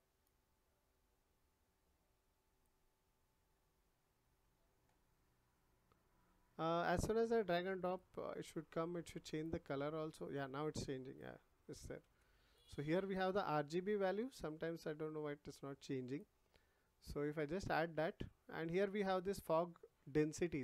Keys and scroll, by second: 12.0 ctrl+z.